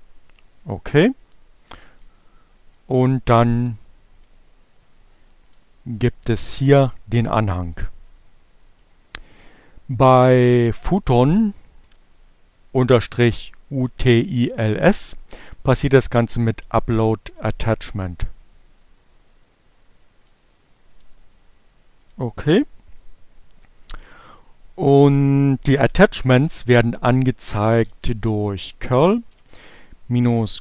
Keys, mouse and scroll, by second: 1.3 click, 3.8 click, 5.3 click, 6.6 click, 15.7-17.6 drag, 18.7 click, 20.3 click, 22.3 click, 25.2-26.3 typing, 27.6-28.9 typing, 30.4-30.6 typing.